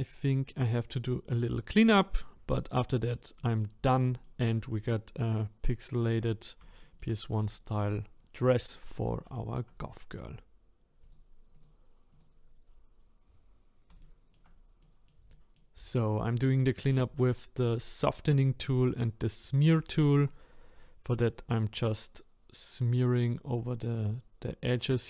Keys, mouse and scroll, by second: 2.5-2.9 scroll down 4, 2.9-4.6 middle drag, 4.6-5.4 scroll up 1, 5.4-5.7 scroll down 3, 5.7-8.2 middle drag, 8.2-8.5 scroll down 2, 8.5-11.1 shift+middle drag, 11.5 click, 13.0 scroll up 2, 14.2 scroll up 3, 14.2-17.7 shift+middle drag, 17.7-19.0 drag, 19.4-19.9 scroll up 1, 19.9 shift+middle click, 20.4-21.2 scroll up 3, 21.2-24.3 drag.